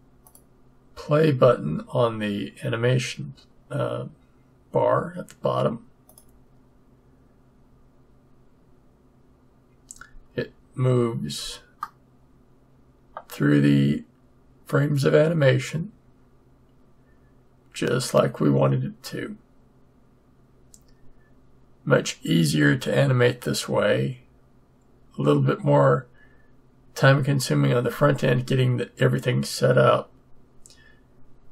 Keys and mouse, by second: 0.2-2.1 drag, 6.0-7.8 drag, 11.9-13.9 middle drag.